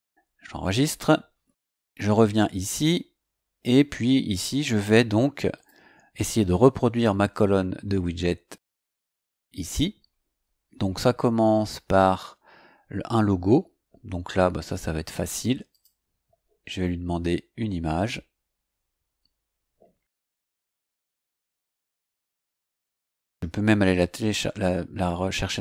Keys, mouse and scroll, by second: 2.6 click, 5.5 click, 8.4 click, 9.6-12.3 scroll up 11, 15.7 click, 18.8 scroll down 1, 20.7 click, 25.4 click.